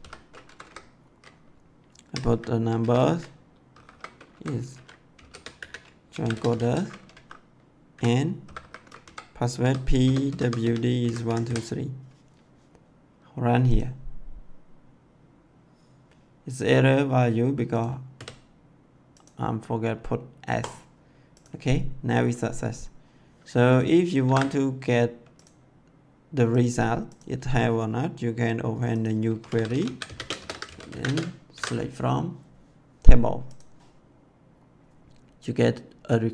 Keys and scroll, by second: 0.4 Left, 2.0 1, 2.2 ,, 3.6-6.5 typing, 7.1 Right, 7.8 ,, 8.4 !, 9.0 Left, 9.6-11.4 typing, 18.1 s, 24.2 ctrl+c, 29.3-31.0 typing, 31.4 ctrl+v.